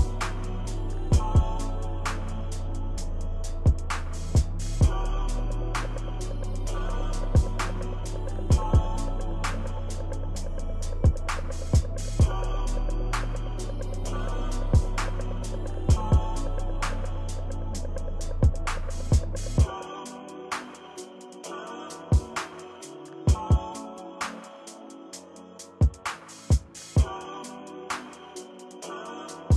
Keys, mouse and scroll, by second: 0.5 click, 0.9 ctrl+-, 1.0 ctrl+=, 1.0 ctrl+scroll down 1, 1.2 click, 2.0 ctrl+-, 2.1 ctrl+=, 2.1 scroll down 2, 2.2 click, 3.1 ctrl+-, 3.1 ctrl+=, 3.2 click, 3.4 click, 4.0 ctrl+-, 4.3 ctrl+=, 4.5-5.9 drag, 5.9 ctrl+-, 6.0 ctrl+=, 6.1 click, 6.7 ctrl+-, 6.9 ctrl+middle click, 6.9 ctrl+scroll, 7.0 click, 7.0 s, 7.7 click, 8.3 click, 8.9 ctrl+=, 9.1 click, 9.6 click, 10.6 click, 10.8 click, 11.3 click, 11.5 ctrl+-, 11.5 ctrl+scroll down 2, 11.7 click, 11.9 ctrl+-, 11.9 ctrl+middle click, 12.1 click, 12.6 ctrl+-, 12.7 ctrl+middle click, 13.0 ctrl+middle click, 13.0 ctrl+=, 13.2 click, 14.1 click, 14.3 ctrl+-, 14.5 ctrl+-, 14.9 ctrl+=, 15.1 click, 15.2 click, 15.5 click, 15.8 ctrl+-, 15.8 scroll down 2, 16.1 ctrl+=, 16.2 click, 17.6 click, 18.4 ctrl+=, 18.5 shift+click, 19.2 click, 19.4 click, 19.5 click, 19.7 ctrl+-, 19.9 click, 20.1 click, 20.1 ctrl+-, 20.3 ctrl+=, 21.0-23.3 drag, 23.3 ctrl+-, 23.5 ctrl+=, 23.7 click, 23.9 click, 24.2 ctrl+-, 24.6 ctrl+=, 24.9 click, 25.9-26.9 drag, 27.0 ctrl+-, 27.2-28.4 drag, 28.5 ctrl+-, 28.6 ctrl+=, 28.7-29.5 drag.